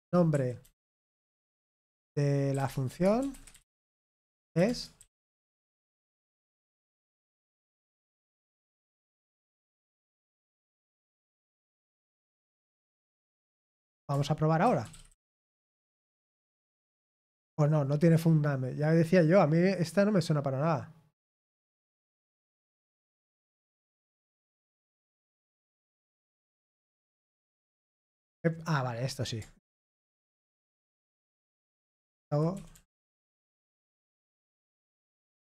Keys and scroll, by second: 0.0-10.3 typing, 12.2-12.9 typing, 15.1 Return, 15.1 typing, 15.4 ctrl+p, 15.6 ctrl+p, 16.0 Return, 29.9 ctrl+p, 30.8 Return, 31.4-35.4 typing.